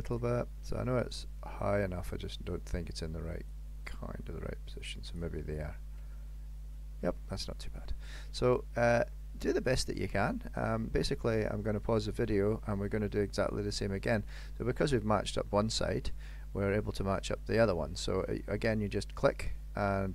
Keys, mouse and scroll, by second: 0.5 middle click, 3.6 click, 5.6 middle click, 7.1 scroll up 1, 7.3-7.9 scroll down 11, 7.9 shift+middle click, 8.4 middle click, 8.8-9.3 scroll up 3, 9.1 shift+middle click, 10.1 middle click, 11.9 shift+middle click, 12.3-12.8 scroll down 2, 12.9 middle click, 18.4 click.